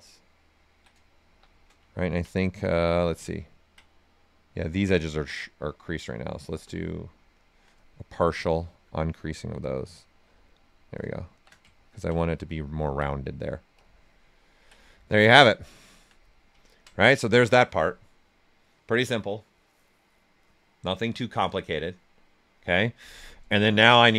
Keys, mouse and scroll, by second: 0.5 ctrl+right click, 1.2 shift+f, 1.9 ctrl+right click, 2.8 click, 3.2 ctrl+right click, 4.8 space, 6.8 space, 7.2 alt+click, 8.1 right click, 8.4 alt+right click, 11.2 shift+f, 11.7 ctrl+right click, 12.8 ctrl+right click, 13.7 click, 14.3 ctrl+right click.